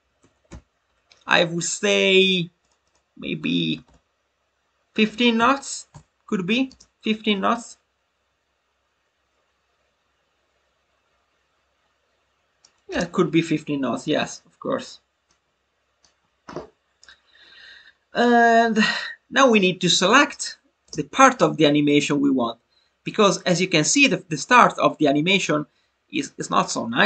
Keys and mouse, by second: 0.3 e, 2.5-7.1 drag, 7.1 space, 15.2 click.